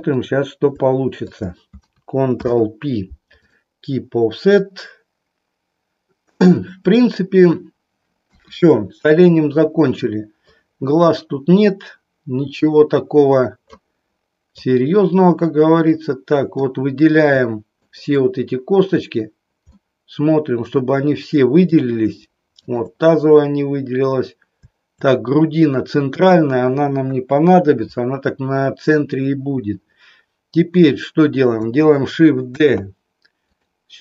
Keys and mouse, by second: 1.2 shift+click, 2.3 ctrl+p, 8.2 KP_1, 10.6 click, 11.7-13.7 drag, 14.7-16.7 drag, 17.8 shift+click, 19.7-21.8 middle drag, 22.6 shift+click, 27.1 KP_1, 32.6 shift+d.